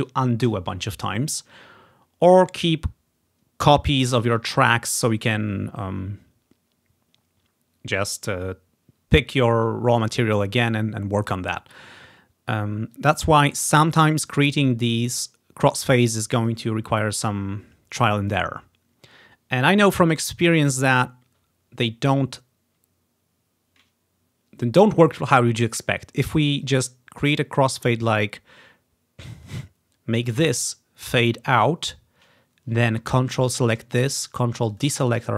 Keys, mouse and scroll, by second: 11.8-13.0 drag, 13.5 click, 13.7-16.6 drag, 17.2-18.3 drag, 26.7-29.7 drag, 30.3 right click, 31.6 right click, 31.7 click, 33.4 ctrl+click, 33.6-35.3 ctrl+drag.